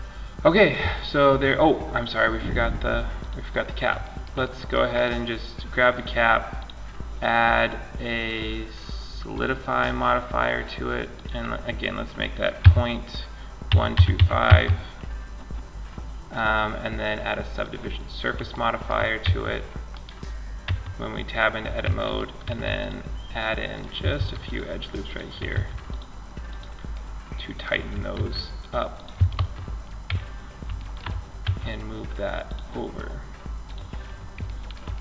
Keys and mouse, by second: 2.3-5.3 drag, 4.1-5.8 right drag, 5.8-6.8 middle drag, 6.8-8.6 drag, 10.3-13.6 drag, 17.1-18.4 drag, 19.1 click, 19.8 Tab, 21.6 ctrl+r, 23.4 ctrl+r, 24.3-28.1 drag, 24.7 ctrl+r, 27.3 ctrl+r, 29.3 Tab, 30.6 m.